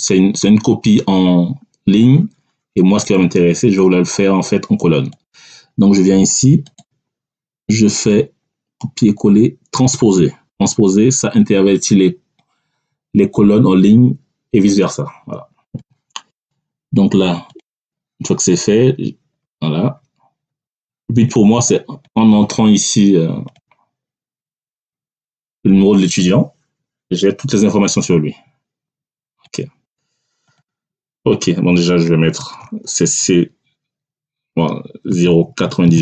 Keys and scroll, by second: 32.5 c, 35.0 0, 35.3 9, 35.7 8.